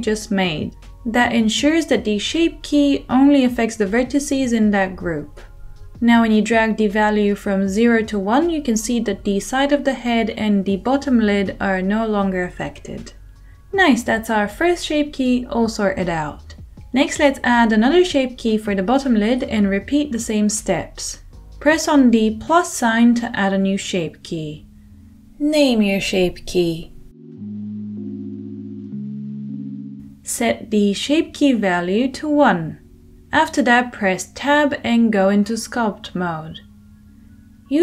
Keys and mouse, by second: 23.6-25.1 middle drag, 25.1-26.9 drag, 26.9 middle click, 27.0-37.8 drag, 29.1 t, 35.7 Tab.